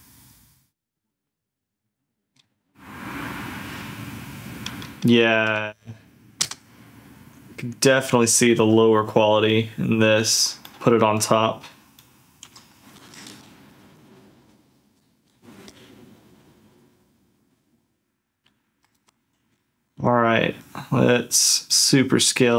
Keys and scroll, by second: 8.7 ctrl+f, 12.4 d, 12.9 ctrl+f, 13.3 ctrl+z, 16.5 ctrl+shift+z, 18.3 ctrl+z, 19.4 ctrl+f.